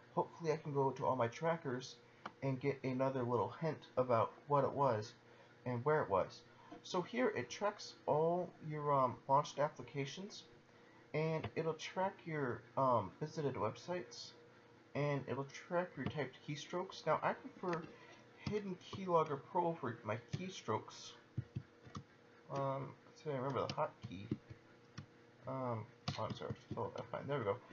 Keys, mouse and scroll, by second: 16.3 click, 21.3 ctrl+alt+h, 24.3 ctrl+alt+F10, 26.5 ctrl+alt+F9.